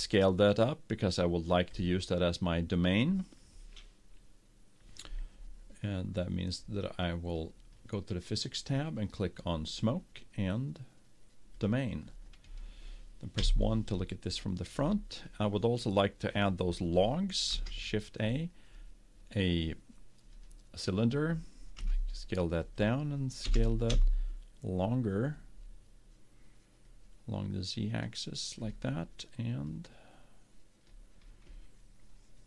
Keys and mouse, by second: 7.3-11.4 drag, 11.7-13.3 drag, 13.6 KP_1, 17.7 shift+a, 22.0 s, 23.6 s, 30.0-31.5 drag.